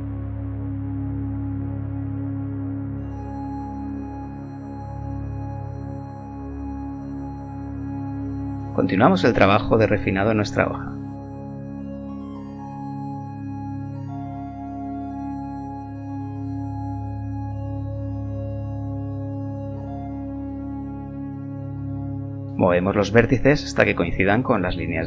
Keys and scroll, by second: 5.9 g, 9.5 ctrl+r, 11.3 a, 11.3 b, 14.7 ctrl+r, 17.0 g, 20.3 g, 23.9 g.